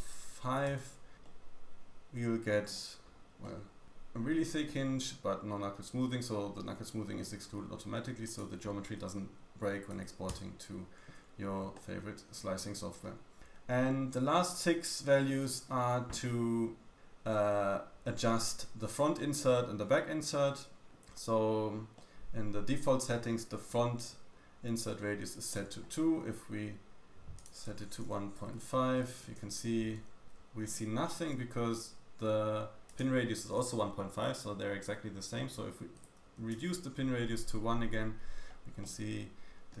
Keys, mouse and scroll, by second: 1.2 middle click, 2.9-3.3 scroll down 2, 3.3 middle click, 4.3-4.9 scroll down 1, 4.9 scroll up 2, 8.2 click, 11.7 middle click, 13.3-14.4 scroll up 1, 14.7-15.1 scroll up 1, 15.1-16.4 scroll down 1, 16.4 middle click, 19.1 middle click, 21.9 middle click, 25.4 middle click, 27.3 click, 32.8 click, 38.2-38.7 scroll up 1, 38.7 middle click, 38.7-39.8 scroll down 1.